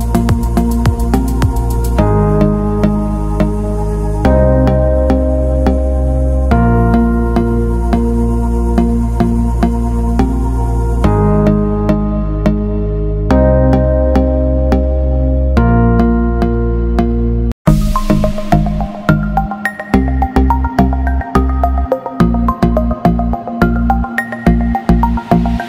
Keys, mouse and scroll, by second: 3.4 c, 4.1 alt+Tab, 5.6 t, 6.0 click, 9.6 click, 11.8 ctrl+v, 13.8 click, 14.4-14.8 alt+scroll up 1, 15.5 scroll up 1, 15.7 click, 17.6 x, 18.4 super+BackSpace, 19.8 click, 24.2 BackSpace.